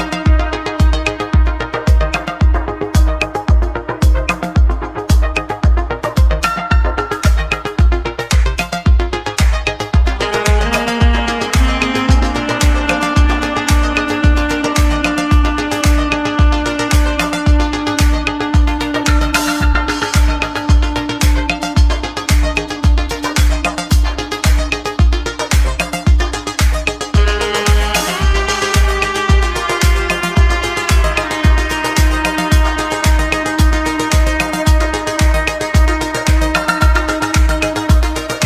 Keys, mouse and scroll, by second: 0.7 a, 1.6 3, 4.1 click, 4.6 click, 5.5 x, 7.4 x, 8.3 a, 9.7 alt+e, 10.3 alt+e, 20.3-22.8 middle drag, 23.9 click, 27.3-27.7 scroll down 2, 27.7-28.2 scroll up 1, 28.2 `, 29.8-30.6 scroll down 1, 30.6 click, 31.4 middle click, 32.1-32.5 scroll down 4, 33.1 middle click, 33.5-33.8 scroll down 3, 34.1 middle click, 35.0-35.5 scroll down 2, 35.5 middle click, 36.3 click, 37.3-37.6 scroll up 1, 37.6 Tab.